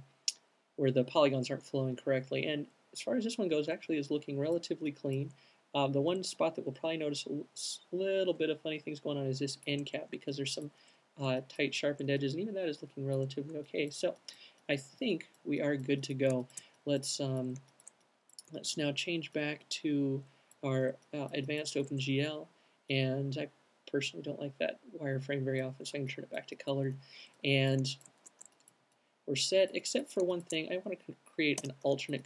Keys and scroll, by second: 31.6 alt+shift+q.